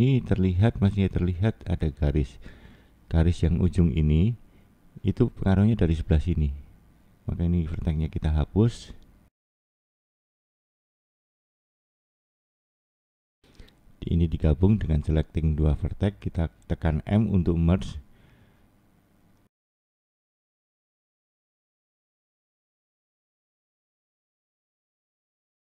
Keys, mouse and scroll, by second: 0.9 middle click, 1.8 scroll up 2, 2.6 shift+middle click, 5.4 click, 6.2 middle click, 8.2 Delete, 11.9 Delete, 13.2-13.6 scroll up 2, 14.0 middle click, 15.1 click, 19.2 m, 22.9 click.